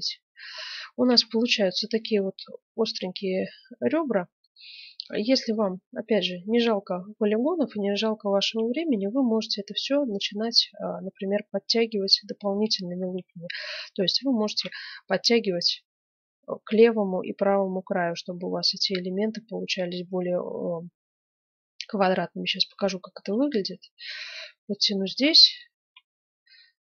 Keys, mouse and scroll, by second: 1.0 KP_1, 1.6-3.6 middle drag, 3.8 middle click, 4.2 middle click, 4.4 middle click, 5.0 middle click, 5.2 Tab, 6.9-8.7 middle drag, 9.9-13.4 middle drag, 13.4 click, 13.6 middle click, 13.7 click, 14.4 ctrl+r, 25.1 ctrl+r.